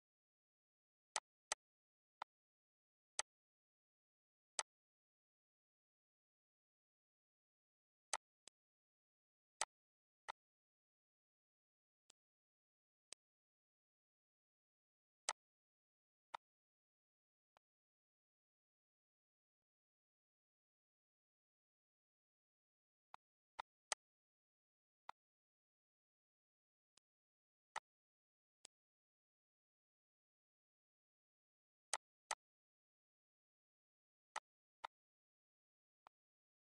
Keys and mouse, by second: 0.9 click, 1.9 click, 2.9 click, 4.3 click, 7.9 click, 9.4 click, 9.9 click, 11.8 click, 12.8 click, 16.1 click, 17.3 click, 19.4 click, 22.9 click, 24.8 click, 26.7 click, 27.5 click, 28.3 click, 31.7 click, 34.1 click, 35.8 click.